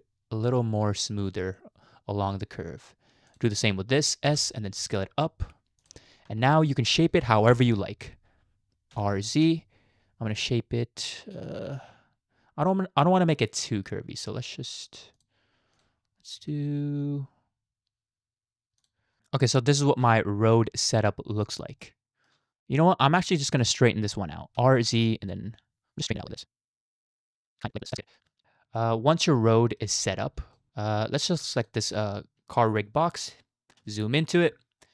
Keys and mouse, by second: 3.3 click, 4.3 s, 15.7 click, 16.4 r, 20.0 Tab, 21.8 shift+middle click, 23.0 shift+middle click, 24.6 r, 28.2 shift+middle click, 28.4 Tab, 28.4-28.8 middle drag, 29.4-29.8 middle drag, 30.6 shift+middle click, 31.6 click, 33.8 KP_Decimal, 34.8-34.9 middle drag.